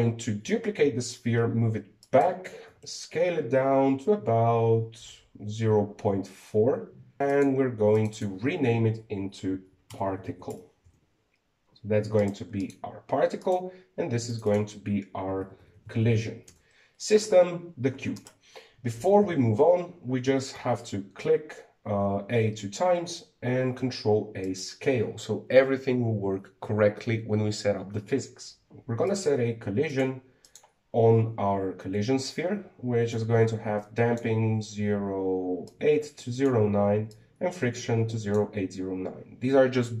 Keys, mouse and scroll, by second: 1.2 shift+d, 3.4 s, 8.1 click, 8.7 click, 8.9-11.9 drag, 13.0 right click, 13.4 right click, 14.2 right click, 15.1 click, 15.2-16.5 drag, 16.5 l, 18.9 right click, 20.0 ctrl+z, 21.0 a, 21.3 a, 24.6 ctrl+a, 29.9 click, 30.7 click, 31.2 click, 33.9-40.0 drag.